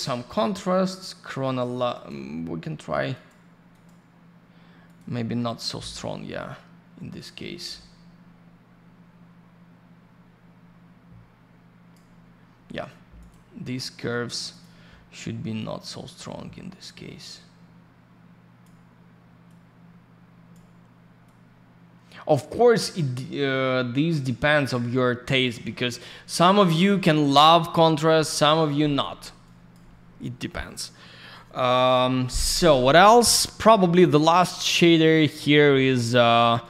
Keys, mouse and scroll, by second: 1.9 click, 2.1 click, 3.1 click, 3.3 click, 3.7 click, 3.8 click, 4.9 click, 4.9 click, 5.5 click, 5.5 click, 7.1 click, 13.2 click, 13.3 click, 14.5 click, 14.6 click, 15.6 click, 19.5 click, 21.3 click, 29.4 click, 33.6 scroll down 1, 34.0 middle click, 34.5 scroll down 1, 35.7 middle click, 35.8 middle click, 36.6 click.